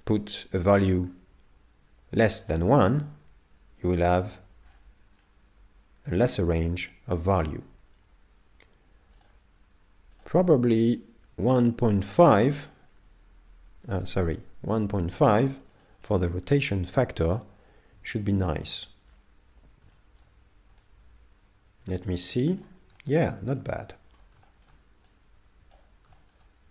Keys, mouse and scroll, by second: 4.7-5.2 scroll up 6, 5.2 middle click, 9.2 click, 14.7 click, 19.9 shift+middle click, 20.8 click, 23.0 shift+middle click, 23.5 z, 23.8 middle click, 24.5 shift+middle click, 25.1 click, 26.1 shift+middle click.